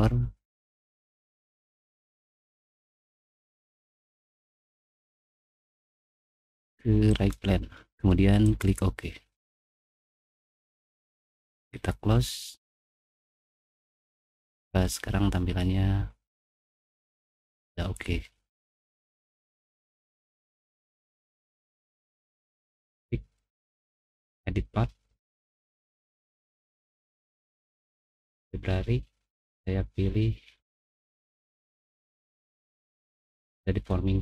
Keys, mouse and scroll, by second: 1.0 click, 1.3 middle click, 1.6 middle click, 1.7 middle click, 2.4 click, 4.3 click, 7.0 click, 7.7 middle click, 8.4 click, 9.4 scroll down 1, 11.3 click, 12.6 middle click, 13.6-14.2 scroll down 1, 14.3-15.7 middle drag, 15.8-16.8 middle drag, 16.9 middle click, 18.4 middle click, 18.9-19.5 scroll down 3, 19.5 middle click, 20.3 click, 20.7 middle click, 21.0 middle click, 21.7 middle click, 24.2 click, 27.0 click, 29.9 middle click, 30.4 middle click, 31.6 click, 32.6 middle click.